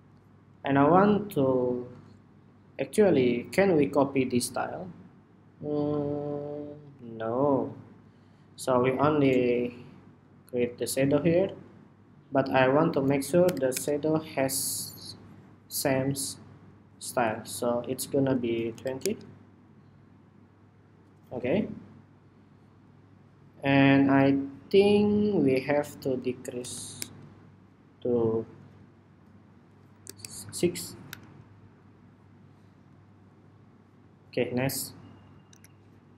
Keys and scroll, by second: 31.7 super+-, 35.2 super+=, 36.0 super+=.